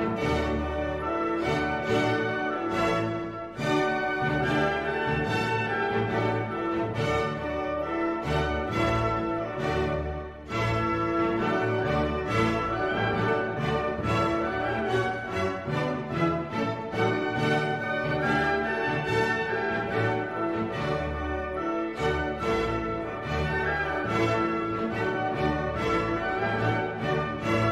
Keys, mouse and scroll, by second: 1.3 click, 2.4 click, 6.2 click, 8.4 click, 10.9-11.9 drag, 12.4 click, 13.5 click, 17.0 click, 17.9 click, 18.3 click, 19.7 click, 20.6-21.8 drag, 22.7 click, 23.7 click, 24.7 click, 25.2 click, 27.2 F2.